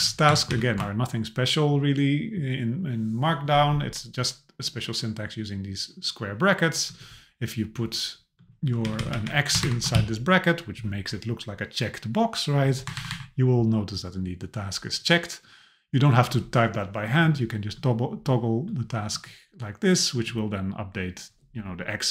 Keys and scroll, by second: 0.5 shift+super+Left, 8.8 Left, 9.6 shift+Right, 12.8 Right.